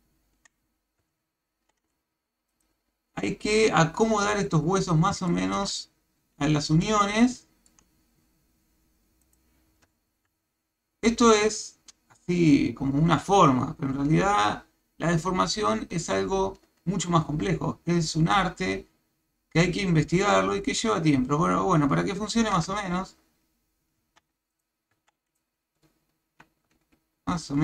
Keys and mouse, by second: 0.3 Tab, 1.1 ctrl+Tab, 2.6 click, 5.3 shift+middle drag, 6.8-7.7 shift+middle drag, 9.2 click, 10.3 ctrl+Tab, 24.0 Tab, 25.0 Tab, 26.7 g.